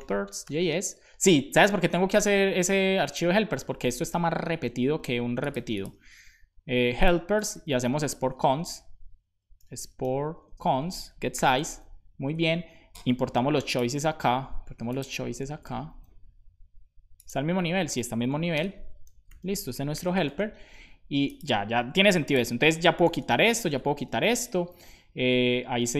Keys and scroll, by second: 0.0-0.9 typing, 3.5 super+Right, 7.6 super+v, 8.1 super+Left, 8.3-10.4 typing, 10.6 super+s, 11.6 super+s, 15.8 super+x, 18.2 super+Left, 18.5 Return, 18.8 Up, 19.0 super+v, 19.2 super+s, 20.1 super+s, 22.7 super+Right, 23.0 shift+super+Left, 24.1 BackSpace.